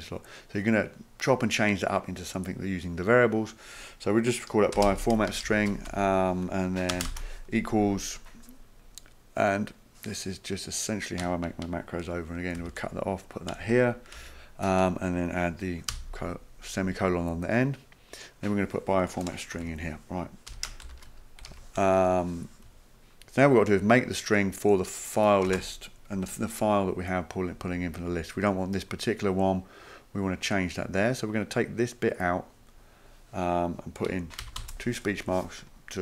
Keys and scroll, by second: 4.5-7.1 typing, 12.6 ctrl+x, 14.2 ctrl+v, 15.9 ;, 19.5 Right, 19.6 Right, 19.7-22.0 typing, 25.5 space, 34.4 typing.